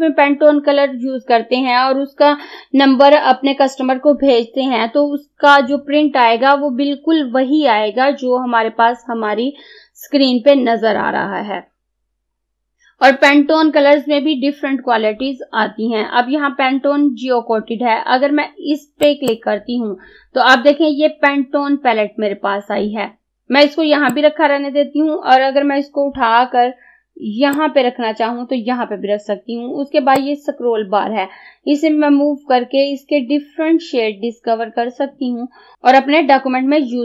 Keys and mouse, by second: 19.1 click, 24.2-35.9 drag.